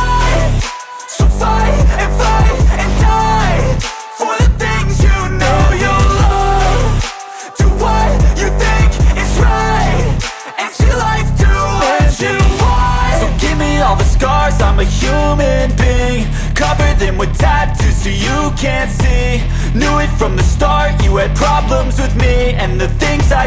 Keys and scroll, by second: 0.1 Return, 3.3-4.6 typing, 5.5 ctrl+s, 22.2 BackSpace.